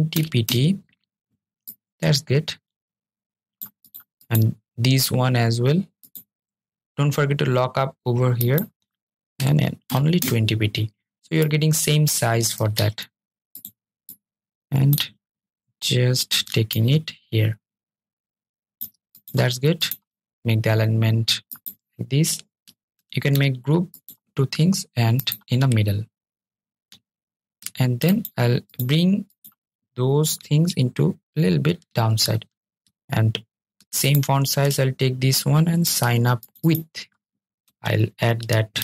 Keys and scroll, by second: 10.2 super+z, 11.6 super+z, 12.6 super+z, 22.1 super+g.